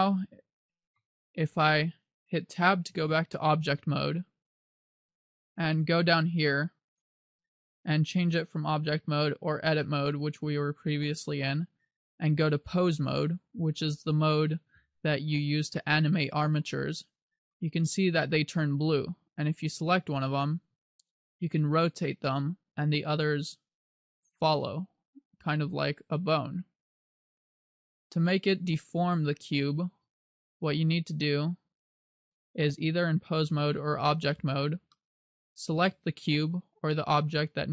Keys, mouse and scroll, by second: 1.0 KP_7, 3.1 Tab, 4.4-4.8 scroll down 2, 7.0 click, 19.7 right click, 20.7 r, 24.4 right click, 25.1 right click, 25.6 r, 28.0 right click, 30.0 r, 30.8 right click, 32.4 click, 35.0 middle click, 36.7 right click.